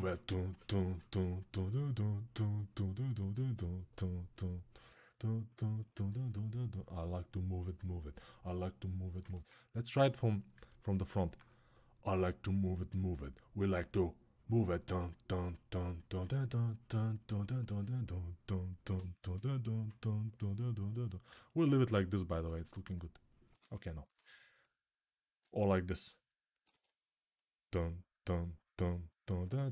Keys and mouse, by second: 9.1 ctrl+z, 10.2-11.5 alt+middle drag, 11.5-29.4 drag, 23.3 ctrl+z, 26.5 ctrl+z.